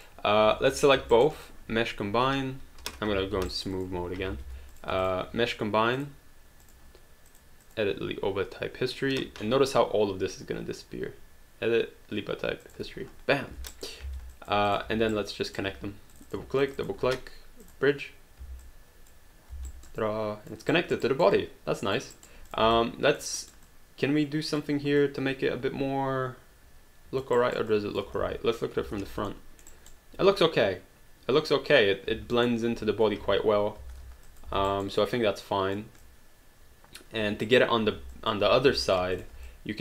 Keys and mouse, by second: 0.7 shift+click, 1.1 alt+right click, 1.4 alt+click, 3.5 alt+right click, 3.7 alt+click, 4.3 alt+d, 4.7 click, 5.0 shift+click, 6.0 click, 12.6 click, 13.7 alt+right click, 14.0 alt+d, 14.3 alt+click, 14.7 click, 15.1 right click, 15.7 q, 16.1 click, 16.6 shift+click, 17.6 click, 18.6 alt+click, 19.5 alt+d, 19.7 alt+right click, 21.3 alt+click, 22.2 alt+right click, 22.5 click, 22.8 alt+click, 23.4 alt+right click, 23.6 alt+click, 25.0 alt+click, 27.4 alt+right click, 27.8 alt+click, 28.2 space, 29.3 alt+middle click, 29.7 alt+right click, 32.4 alt+middle click, 33.2 space, 34.3 alt+click, 34.5 alt+d, 35.0 alt+right click, 36.0 alt+click, 38.2 alt+click, 38.9 alt+click, 39.5 alt+click.